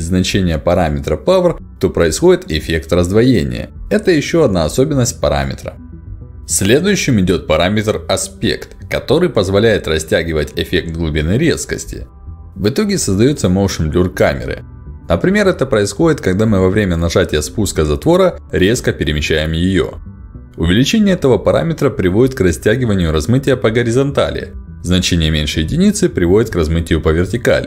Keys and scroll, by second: 1.2 0, 1.3 Return, 2.5 ctrl+alt+d, 7.2 ctrl+alt+d, 12.7 1, 12.8 0, 13.9 Return, 24.6 0, 25.2 Return.